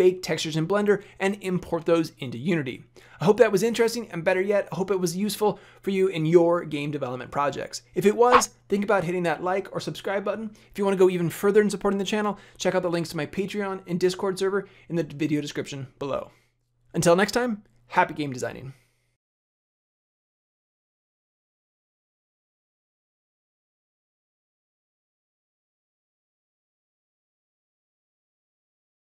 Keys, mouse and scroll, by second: 19.1-22.7 scroll.